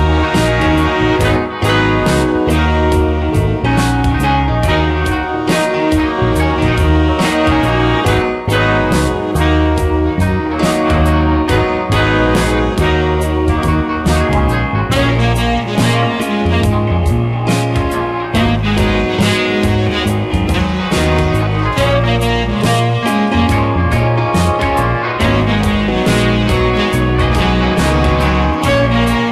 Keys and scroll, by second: 4.0 space, 12.5 space, 17.9 space, 21.4 space.